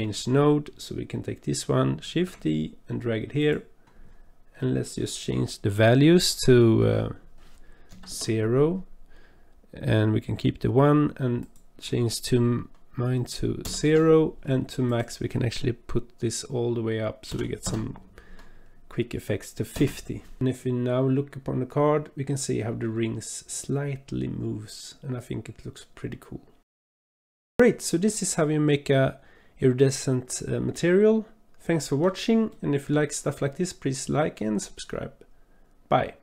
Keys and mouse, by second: 2.1 shift+d, 4.6 click, 7.3 click, 11.4-13.8 drag, 14.9-19.8 drag, 20.7-26.6 middle drag, 26.9 shift+middle click, 27.0 click, 27.7-32.1 drag, 32.6-32.9 shift+middle drag.